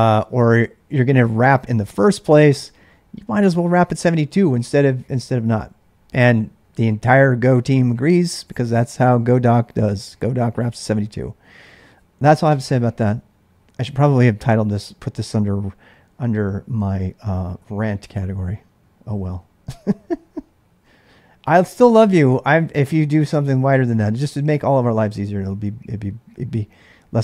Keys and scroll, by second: 0.0-3.3 typing, 0.2 Return.